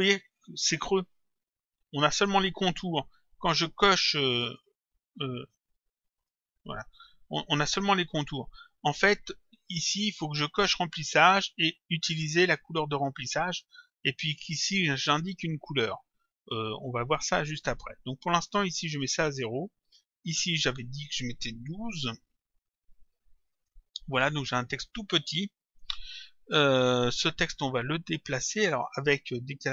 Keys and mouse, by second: 6.2 click, 13.0 click, 17.6 click, 18.9 click, 20.4 click, 22.9 Delete, 23.5 click.